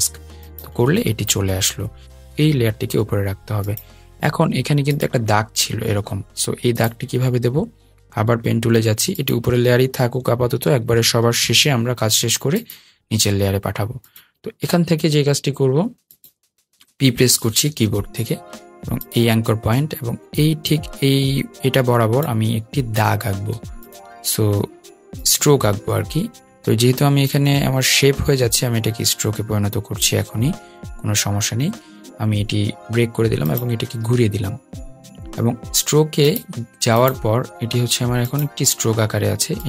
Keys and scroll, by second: 8.8 p, 17.3 p.